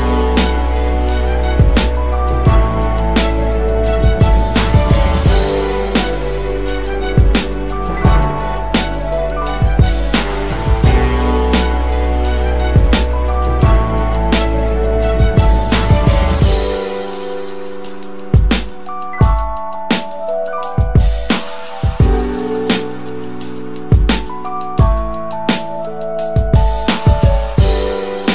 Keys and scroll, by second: 2.2 ctrl+[, 2.6 ctrl+[, 2.8 ctrl+[, 3.0 ctrl+[, 3.2 ctrl+[, 3.8 ctrl+[, 4.1 ctrl+[, 4.2 ctrl+[, 12.2 ctrl+shift+].